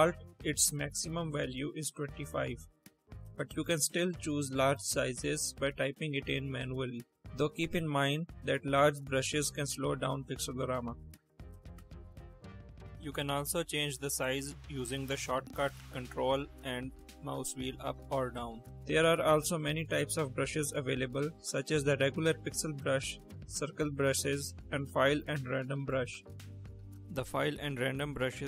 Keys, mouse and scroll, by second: 0.6 click, 1.5 click, 3.1 space, 5.0 click, 6.0 5, 6.1 0, 6.4 Return, 7.5-7.9 drag, 8.2 click, 8.6 1, 8.7 0, 9.0 Return, 9.8 space, 10.3 space, 10.9-12.2 drag.